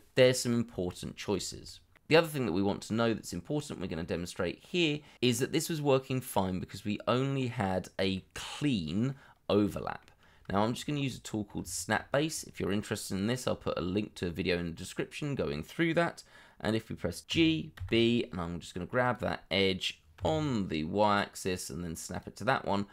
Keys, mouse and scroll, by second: 0.8 middle click, 1.6 shift+middle click, 2.5 shift+middle click, 2.8 middle click, 4.0-4.4 scroll up 1, 4.5 shift+middle click, 7.1 middle click, 10.5 shift+middle click, 11.0 middle click, 11.7 shift+middle click, 12.2 scroll up 1, 17.3 g, 17.7 b, 20.1 y, 22.6-22.9 scroll down 1.